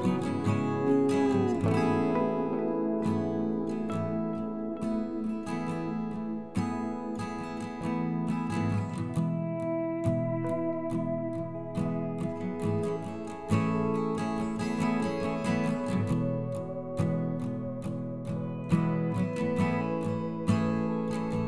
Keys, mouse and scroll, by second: 3.3 KP_7, 3.7-4.2 scroll down 1, 4.2 r, 6.8-7.3 scroll down 1, 7.3-7.6 scroll up 2, 7.6 right click, 8.6-9.0 scroll down 1, 9.0 scroll up 1, 9.3-10.1 scroll down 1, 10.1-13.0 drag, 13.0 ctrl+z, 13.3 ctrl+z, 15.4 KP_1, 15.9-16.2 scroll up 2, 16.2 middle click, 16.7 KP_1, 18.8 alt+x, 19.6 click, 20.1 ctrl+z.